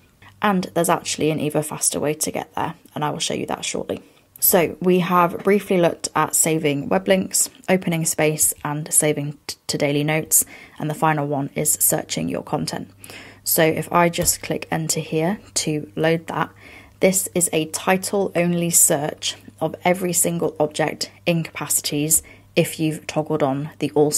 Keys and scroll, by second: 4.4 fn+Down, 7.0 fn+Down.